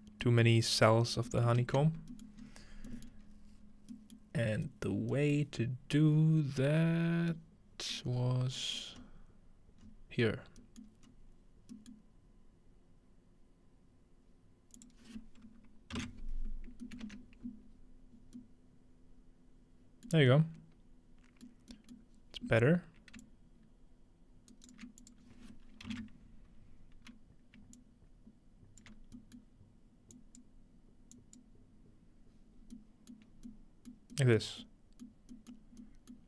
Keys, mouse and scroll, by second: 0.5 middle click, 1.5 ctrl+middle click, 2.4-3.6 scroll up 3, 3.6 scroll down 2, 5.6-6.9 scroll up 3, 6.9-7.4 scroll down 3, 8.0-8.6 scroll down 2, 9.0 scroll up 2, 9.8 scroll up 2, 10.6-14.8 scroll up 3, 10.9-14.8 middle drag, 14.8-16.0 drag, 16.8-18.4 ctrl+middle drag, 21.5 middle click, 23.2-24.8 shift+drag, 24.5 shift+right click, 25.0 click, 27.8-32.6 shift+drag, 29.4-30.4 shift+middle drag, 32.6-33.2 scroll down 2, 33.2 middle click, 33.3 scroll up 2, 34.4 middle drag, 35.1 middle drag, 35.5 middle click, 36.1 middle click.